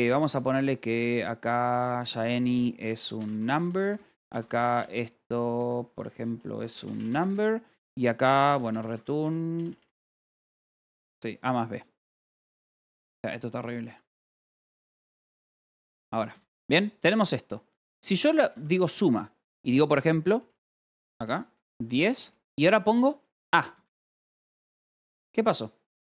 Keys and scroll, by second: 0.0-9.5 typing, 10.9 Return, 11.4 Escape, 12.9-24.3 typing, 16.7 ctrl+s, 17.6 Return, 23.7 Escape.